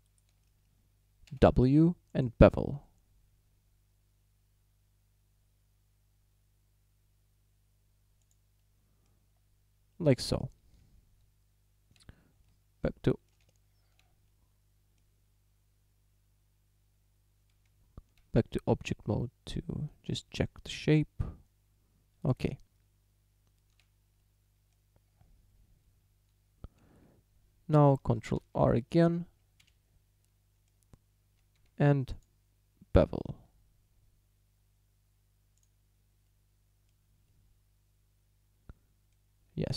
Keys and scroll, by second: 1.3 w, 11.3 Tab, 13.5 Tab, 17.7 Tab, 22.5 Tab, 26.8 a, 28.4 ctrl+r, 29.6 Escape, 31.6 w.